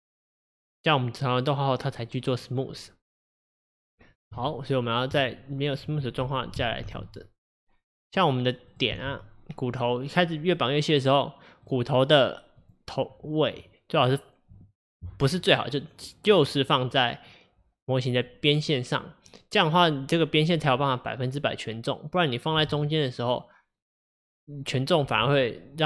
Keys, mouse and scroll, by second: 1.9 click, 2.4 click, 3.6 click, 4.4 Tab, 5.8 click, 6.9 g, 8.7 click, 9.0 g, 12.7 click, 22.6 g.